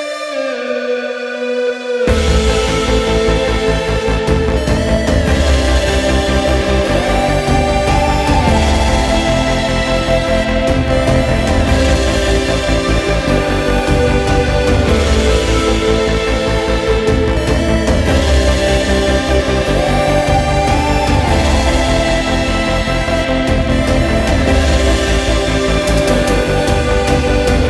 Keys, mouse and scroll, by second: 7.2-13.3 middle drag, 13.7 click, 15.5 click, 17.3 shift+click, 19.8 shift+click, 21.0 shift+click, 22.5 shift+click, 23.8 shift+click, 25.2 x.